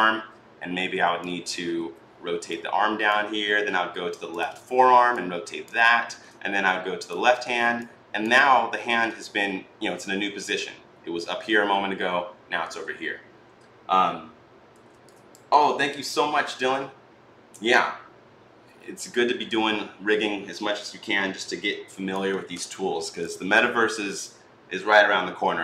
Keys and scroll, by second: 1.6 r.